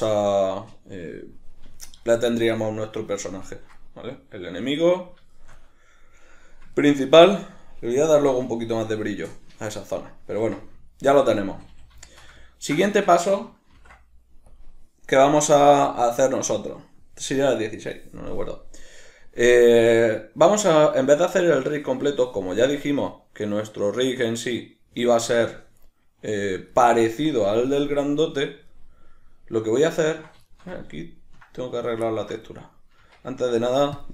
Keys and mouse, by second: 1.8-10.4 shift+middle drag, 10.4 Tab, 10.9 ctrl+middle click, 11.5 a, 12.1 shift+middle click, 12.9-32.6 shift+middle drag, 13.7 ctrl+s, 32.6 right click, 33.0 Tab.